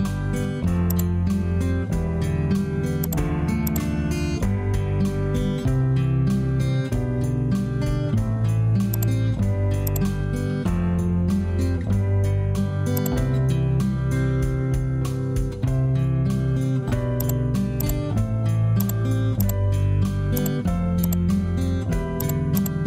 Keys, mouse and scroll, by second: 6.2 Return, 11.9 Return.